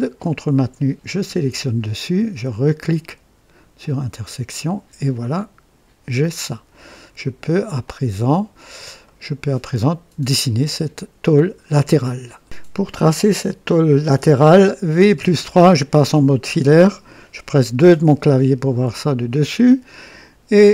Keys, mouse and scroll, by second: 1.0 ctrl+click, 3.7 click, 5.3-7.5 drag, 7.8 click, 9.0-9.5 right drag, 9.6 click, 14.9 v, 15.1 KP_3, 17.7 KP_2, 19.2-20.1 right drag.